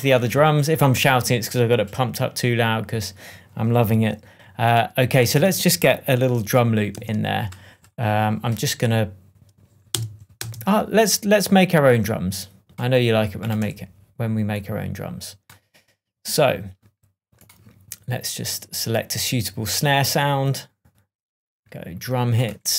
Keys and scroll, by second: 5.3 super+s, 6.9 super+t, 9.9 space, 13.6 BackSpace.